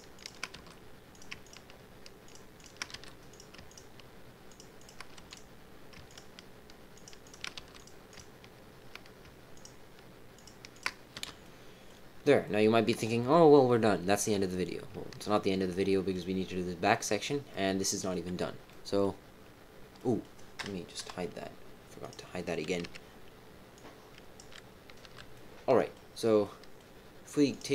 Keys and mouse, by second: 0.5 f, 1.1 click, 1.4 shift+click, 2.2 shift+click, 2.6 shift+click, 2.9 f, 3.3 click, 3.6 shift+click, 4.7 shift+click, 5.1 f, 5.2 click, 6.0 shift+click, 6.9 shift+click, 7.2 shift+click, 7.5 f, 8.1 click, 9.5 shift+click, 10.3 shift+click, 10.7 shift+click, 11.1 f, 11.4 middle click, 12.4 middle click, 15.9 middle click, 16.8 middle click, 17.5 middle click, 18.6 middle click, 19.9 middle click, 20.9 KP_3, 22.0 click, 22.8 b, 25.0 h, 25.3 middle click, 26.4 middle click.